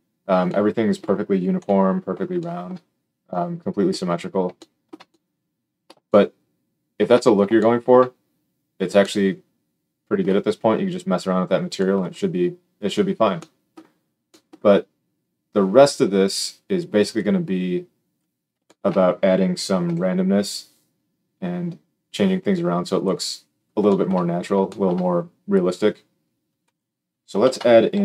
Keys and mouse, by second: 1.5 KP_7, 19.8 g, 23.0-26.6 middle drag, 26.6 click, 26.7-28.0 middle drag, 27.4 shift+a.